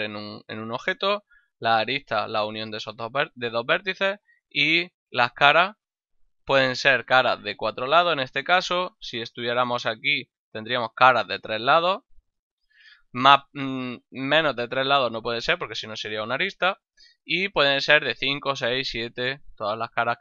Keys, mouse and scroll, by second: 1.1 ctrl+Tab, 1.6 click, 2.0 right click, 4.8 ctrl+Tab, 5.3 click, 5.7 right click, 8.8 Tab, 9.5 right click, 9.8 Tab, 10.5 right click.